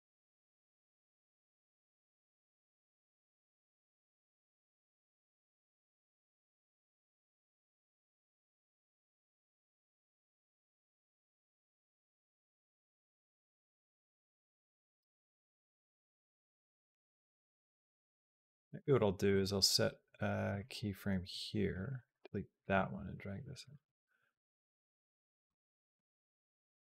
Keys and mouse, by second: 1.4 click, 2.5 click, 3.6 shift+d, 5.8 click, 6.6 space, 10.5 space, 11.1 click, 11.1 space, 11.2 space, 14.7 space, 15.0 click, 15.6-17.7 drag, 19.2-20.4 right drag, 21.5 click, 21.8 x, 22.4 click, 22.6 g, 23.5 space, 25.3 space, 25.6-26.8 drag, 25.7 space.